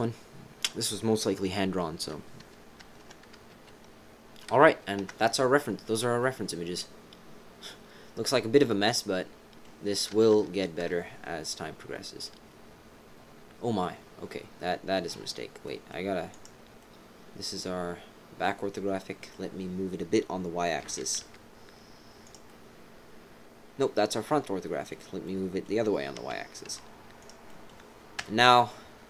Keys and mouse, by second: 2.1-3.5 typing, 4.5 KP_3, 4.6 KP_1, 5.0 KP_7, 6.2 click, 6.9-9.6 middle drag, 10.4 KP_3, 10.8 KP_1, 13.8 middle click, 14.4 click, 15.6 click, 16.3 click, 16.8 click, 18.0 click, 19.0 click, 20.8 g, 22.4-23.5 drag, 23.9-24.9 drag, 25.2 click, 26.1 g, 27.5 click, 28.2 KP_1.